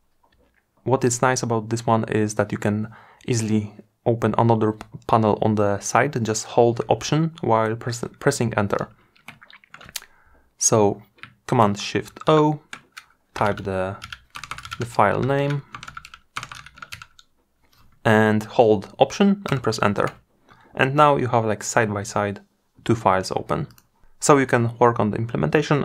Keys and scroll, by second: 11.5 shift+super+o, 18.6 alt+Return.